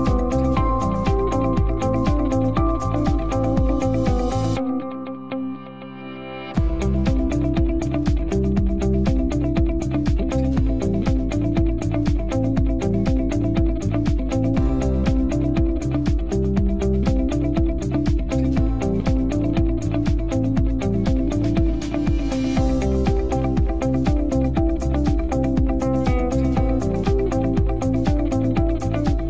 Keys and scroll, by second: 10.1 Delete, 25.8 BackSpace.